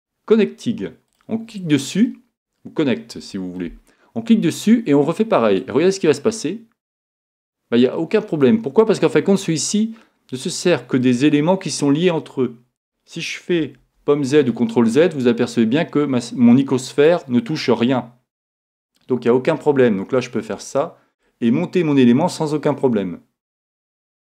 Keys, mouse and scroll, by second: 2.1-3.9 middle drag, 9.2-10.9 middle drag, 13.8 super+z, 14.5-16.1 middle drag, 16.6-18.4 middle drag, 23.9 middle click.